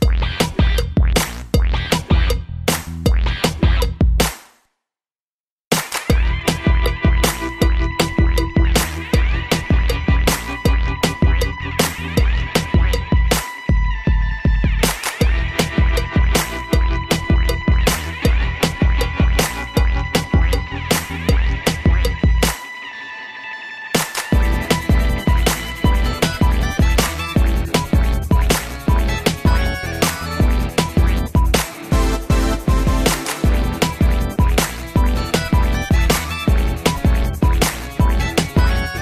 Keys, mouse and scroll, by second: 8.5 middle click, 8.8 scroll up 3, 9.5 3, 10.9 scroll up 1, 12.5-12.8 typing, 13.6 click, 14.9 ctrl+z, 15.7 click, 21.8 click, 21.9 click, 23.1 click, 28.1 click, 29.9 click, 35.2 middle click, 35.9 scroll down 3, 36.3 shift+middle click, 36.4 shift+middle click, 36.5 middle click, 38.1 7, 38.7-39.0 scroll up 2.